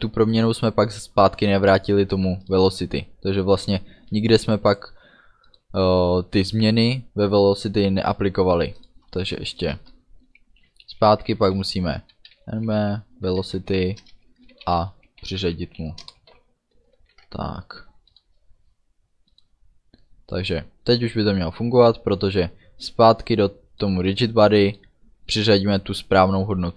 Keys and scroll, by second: 9.7 Return, 11.3-15.3 typing, 14.1 Return, 16.1 Return, 16.4 ů, 17.0 ctrl+s.